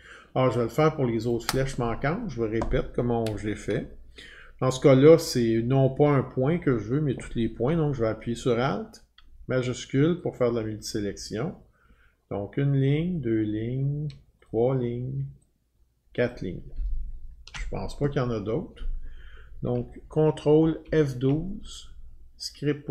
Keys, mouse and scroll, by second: 0.0-0.3 scroll, 1.3 click, 1.4 click, 1.4 click, 1.4 click, 10.9 click, 12.9 click, 14.4 click, 16.3 click, 20.6 ctrl+F12, 22.5 click.